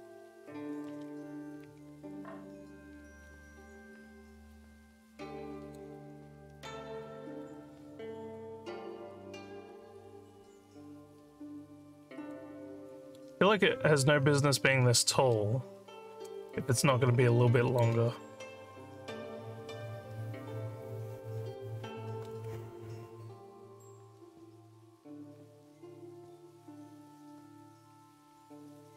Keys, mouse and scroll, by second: 1.6-5.8 alt+drag, 6.5 alt+scroll up 2, 7.0 alt+middle click, 7.7-12.3 alt+drag, 12.7 alt+middle click, 14.5 alt+middle click, 16.5 alt+middle click, 16.9 alt+click.